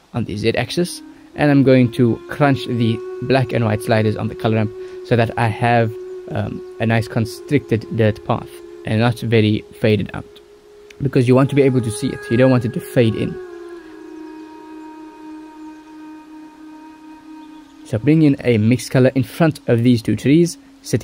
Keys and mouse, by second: 0.3 click, 1.8-4.8 drag, 6.9-8.8 drag, 9.7 click, 10.4 click, 11.4 click, 16.8 click, 18.3 click, 19.0 click, 20.8 ctrl+s, 20.9 click.